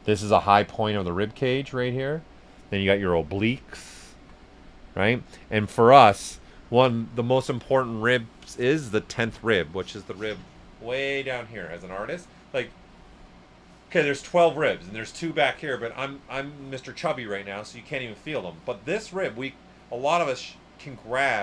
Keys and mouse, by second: 2.3 right click, 4.0 alt+right click, 4.6 right click, 5.5 s, 5.5 click, 6.1 right click.